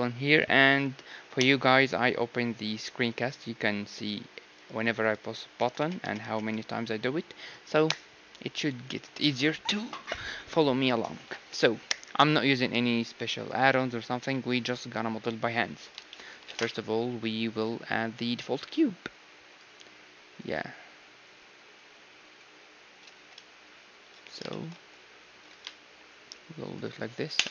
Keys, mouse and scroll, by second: 1.3 n, 4.7-6.4 right drag, 5.0-7.0 drag, 5.5 d, 5.8 d, 6.0 d, 6.3 d, 16.0-18.0 middle drag, 16.5 shift+a, 22.5-24.4 drag, 23.1 g, 24.2-26.6 middle drag, 24.7 s, 25.5 g, 27.3 KP_3.